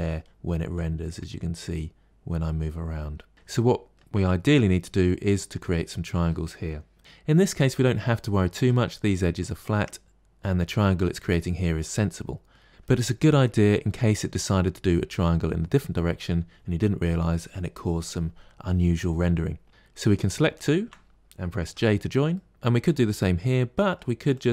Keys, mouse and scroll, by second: 3.3 Tab, 3.5 middle click, 4.1 scroll down 3, 4.7-12.7 middle drag, 13.7-16.8 middle drag, 19.7 middle click, 19.8 click, 20.4 shift+click, 21.5 j, 22.2 middle click, 23.6 middle click, 24.2 click.